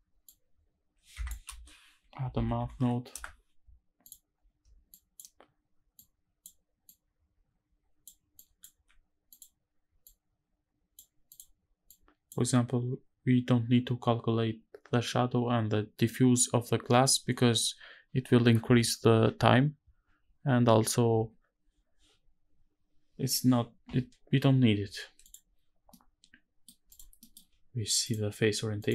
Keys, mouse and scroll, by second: 1.2 space, 4.6 click, 5.7-6.2 drag, 6.6-7.8 drag, 8.1 click, 8.4 g, 9.7 click, 11.0 click, 11.6 click, 24.9 click, 25.6-26.4 middle drag, 26.6 click, 26.9 middle click, 27.7-28.8 drag.